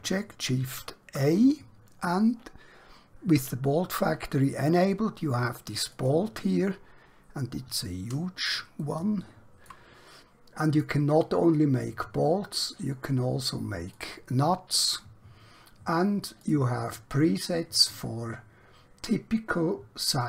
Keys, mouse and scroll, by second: 0.6 shift+a, 5.9 click, 7.0 scroll down 1, 8.9 shift+middle click, 10.1 middle click, 12.5 click, 16.5 click.